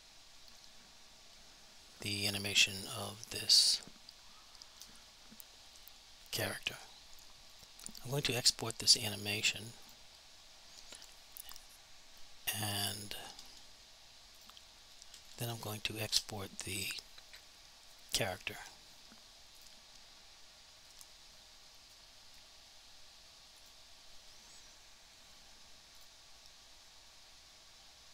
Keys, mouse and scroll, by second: 7.6 click, 14.4 click, 14.7 Left, 15.1 Delete, 16.1 Return, 19.6 click, 23.6 click.